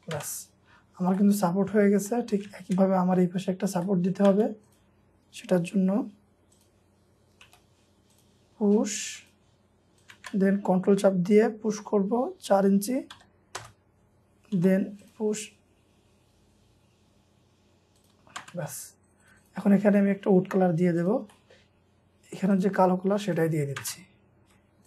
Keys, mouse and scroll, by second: 0.1-0.5 scroll down 2, 0.2 space, 0.7-1.1 scroll up 1, 1.2 middle click, 1.5 scroll down 1, 1.8 scroll up 1, 2.1 middle click, 3.5-3.8 scroll up 1, 3.8 middle click, 4.3 scroll up 1, 7.5 typing, 7.6 scroll up 1, 10.1 p, 13.1 4, 13.6 Return, 14.6 p, 18.3 scroll down 1, 18.4 p, 19.2 double click, 21.3 middle click, 21.8-22.2 scroll down 1, 23.8 space, 24.4 Escape.